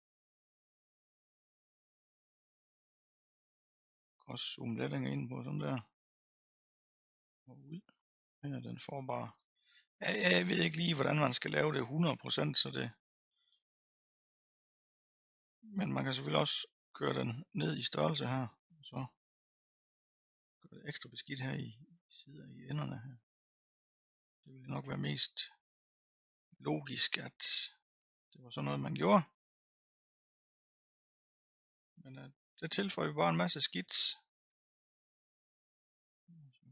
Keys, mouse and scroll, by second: 0.9 middle click, 1.4-2.4 scroll up 3, 2.8 click, 3.8 scroll up 2, 4.8-5.8 drag, 5.8-6.3 scroll down 3, 6.3-7.5 drag, 7.5 middle click, 8.2-11.2 drag, 11.2 middle click, 12.1-16.3 drag, 16.3-17.6 scroll up 1, 17.6-24.2 drag, 24.2-25.2 middle drag, 25.2-26.3 drag, 26.3 middle click, 27.1-28.2 drag, 28.2 middle click, 28.9-30.3 drag, 30.3-31.3 middle drag, 31.3 click, 32.1-33.1 middle drag, 33.1-34.6 drag, 34.6-36.1 middle drag, 36.1-36.7 drag.